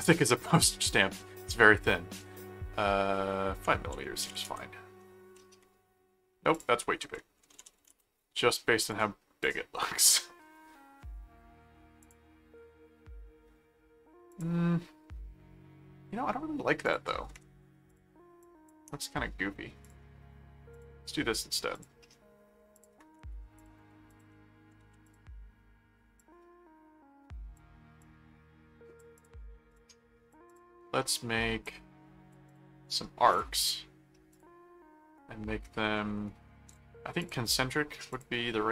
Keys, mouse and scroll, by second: 4.2 m, 4.4 Return, 6.5 click, 7.2-8.1 typing, 8.8 click, 12.0 click, 14.3 click, 16.8 click, 17.9 click, 19.8 click, 20.7 click, 21.7 click, 22.7 click, 23.6 ctrl+click, 24.8 alt+a, 25.1 alt+click, 26.2 click, 28.0 click, 29.1 click, 30.0 click, 30.5 click, 31.6 click, 32.5 click, 33.3 click, 34.3 click, 37.2 click, 38.1 click.